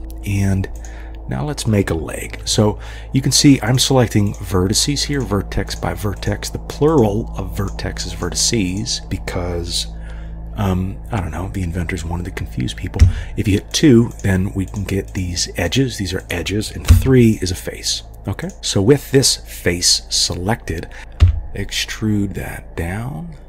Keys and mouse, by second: 0.0 g, 0.8 click, 3.7 click, 4.3 click, 5.2 click, 5.7 click, 6.2 click, 8.2 middle click, 8.7 click, 13.0 2, 13.8 click, 14.1 click, 16.2 click, 16.9 3, 17.3 click, 17.9 click, 18.4 click, 21.2 e.